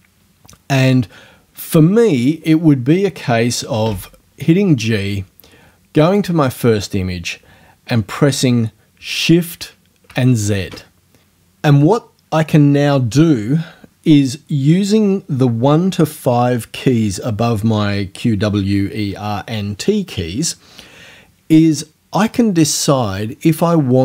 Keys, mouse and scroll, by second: 2.9 scroll up 2, 3.8 g, 6.1 click.